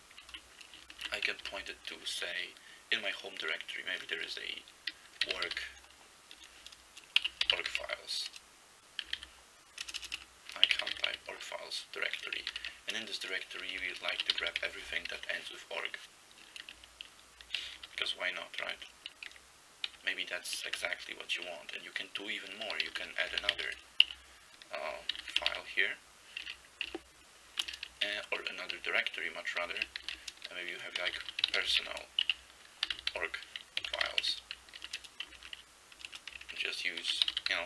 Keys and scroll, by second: 0.0-1.4 typing, 0.2 Left, 5.0-11.6 typing, 12.6-15.1 typing, 17.6 ctrl+f, 17.8 ctrl+f, 18.0 ctrl+f, 18.6 ctrl+f, 19.3 ctrl+b, 19.9 ctrl+b, 20.8 Return, 22.7-26.1 typing, 26.9 Tab, 27.6-28.6 typing, 29.7-37.6 typing.